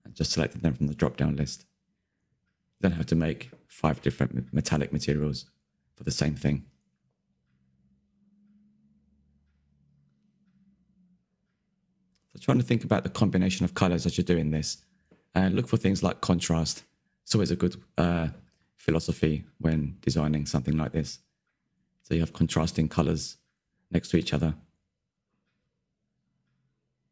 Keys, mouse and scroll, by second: 0.1 click, 0.6 click, 1.1-2.9 middle drag, 2.9 click, 3.4 drag, 3.7 shift+middle click, 3.9 scroll down 2, 4.1-5.1 shift+middle drag, 5.6 scroll up 1, 5.7 shift+middle drag, 5.9 click, 6.0 Tab, 6.1 middle click, 6.6 a, 6.7 a, 7.3 l, 8.4 click, 8.8 scroll up 2, 9.1 shift+middle click, 9.3 click, 9.7 a, 9.7 a, 9.9 l, 10.3 click, 11.1 Tab, 11.4 Tab, 11.5 middle click, 11.7 scroll up 1, 12.0 a, 12.0 a, 12.3 l, 12.7 click, 13.1 Tab, 13.3 scroll down 2, 13.4-13.7 middle drag, 13.7 scroll up 4, 13.9 click, 14.0 Tab, 14.3 a, 14.3 a, 14.5 l, 15.0-16.2 drag, 16.5 click, 16.9 Tab, 17.9 click, 18.1 middle click, 19.1-20.5 drag, 20.9-22.3 scroll down 2, 22.3 click, 22.8 click, 22.9 middle click, 23.1 scroll down 2, 23.2 shift+middle click, 23.9 scroll up 4, 24.1 click, 24.2 Tab, 24.4 click, 24.6 scroll up 1, 24.7 shift+middle click, 25.7 shift+click, 26.2 middle click, 26.5 ctrl+KP_Add, 26.6 ctrl+KP_Add, 27.0 KP_Decimal.